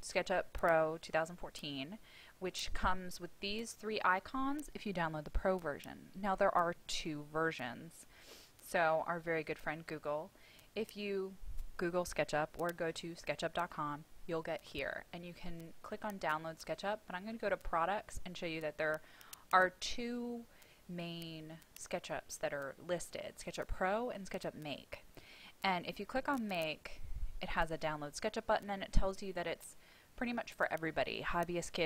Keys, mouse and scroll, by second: 9.1 click.